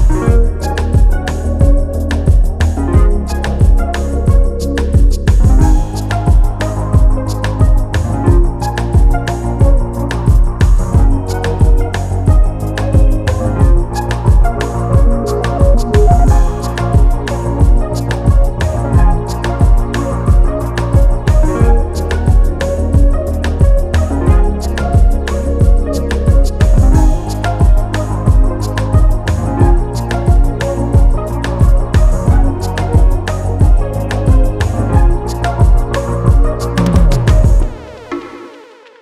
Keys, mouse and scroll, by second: 0.2 scroll down 1, 0.8-1.1 scroll up 1, 1.1-2.0 scroll down 1, 2.4 click, 3.4 click, 7.0 click, 7.7 click, 11.5-12.0 scroll up 1, 12.0 click, 13.3 click, 15.4 click, 18.0 click, 19.1 scroll down 1, 19.9 click, 21.9 g, 22.7 click, 27.0-27.3 scroll up 1, 27.3 scroll down 1, 27.6 click, 28.7 right click, 31.0 click, 34.9 click, 37.5 click, 38.9-39.0 scroll down 2.